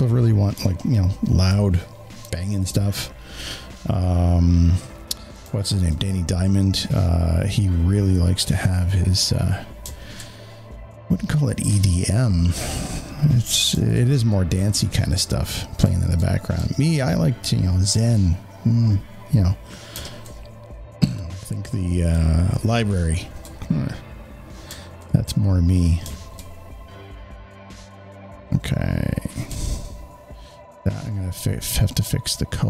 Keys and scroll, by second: 0.5 space, 0.7 space.